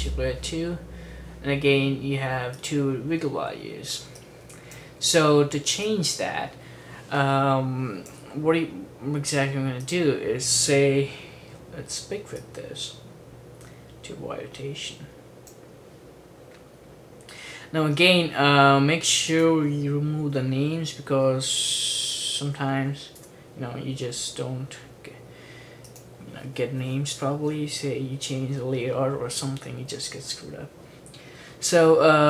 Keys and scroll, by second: 20.4-24.0 typing.